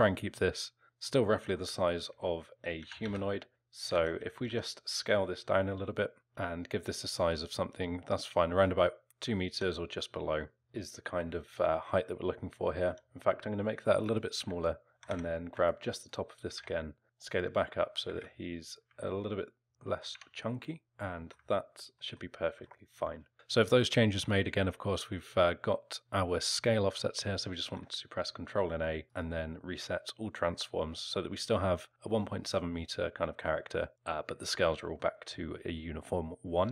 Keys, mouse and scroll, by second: 1.3 middle click, 2.8 s, 4.0 ctrl+z, 4.5 s, 9.5 s, 10.6 alt+middle click, 10.6 scroll up 2, 10.8 middle click, 12.8 s, 14.4 Tab, 14.9 a, 15.1 a, 15.5 b, 16.5 g, 18.1 g, 19.0 alt+middle click, 19.7 scroll up 1, 19.8 middle click, 20.1 Tab, 21.2 alt+middle click, 21.6 scroll up 2, 22.0 middle click, 22.6 alt+middle click, 23.3 middle click, 27.7 ctrl+a, 35.0 middle click, 35.4-36.7 scroll down 1.